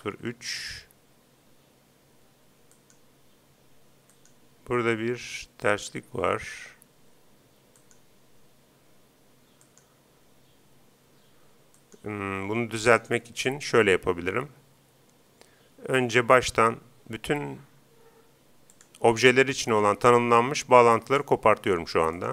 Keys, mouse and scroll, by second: 2.7-7.3 right drag, 7.7-9.5 right drag, 9.6-11.3 right drag, 11.7-14.6 right drag, 18.7-20.5 drag, 19.7-21.5 right drag, 21.1-22.3 drag, 22.2-22.3 right drag.